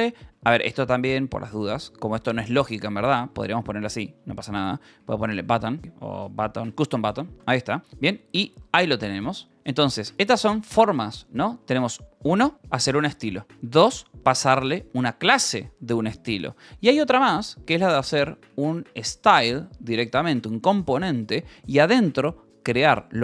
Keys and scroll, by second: 0.2 Escape, 0.4-1.9 typing, 2.9 c, 3.4 space, 4.7-10.0 typing, 11.1 l, 11.4 v, 12.0 e, 12.8 Escape, 13.2-14.4 typing, 15.6 Escape, 16.7-19.8 typing, 21.0 space, 21.5 Return.